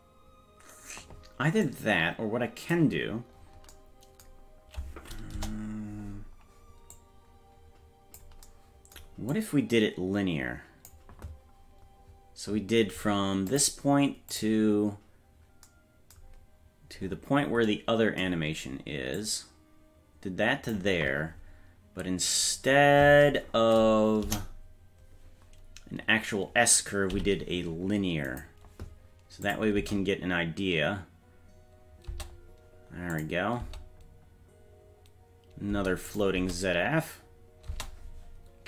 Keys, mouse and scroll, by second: 1.7-2.8 drag, 3.1-5.4 scroll down 7, 5.4 KP_0, 5.8-6.4 scroll down 2, 7.0-8.2 drag, 9.4-10.9 drag, 11.8-13.0 scroll down 2, 13.5 scroll down 1, 13.5-14.6 drag, 17.7-18.3 scroll down 3, 19.2-20.8 drag, 22.3 right click, 24.3 KP_0, 25.3-26.5 scroll up 5, 27.1 t, 29.5 click, 29.8 space, 32.1 space, 33.2 click, 33.6 space, 35.7 space, 36.1 click, 36.4 space, 37.7 space, 38.5-38.6 scroll up 1.